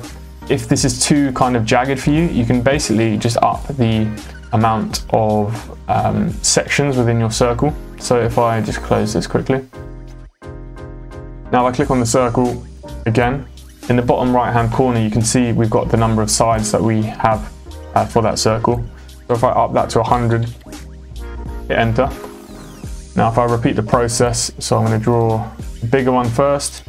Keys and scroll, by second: 19.4-20.3 typing, 21.4 Return.